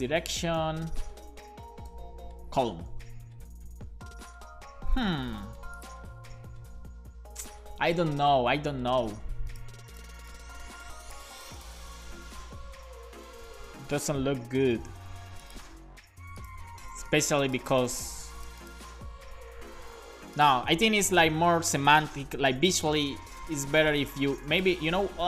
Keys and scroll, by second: 0.0-0.4 typing, 1.5 e, 1.9 x, 2.9 super+s, 22.2 BackSpace, 22.6 super+s.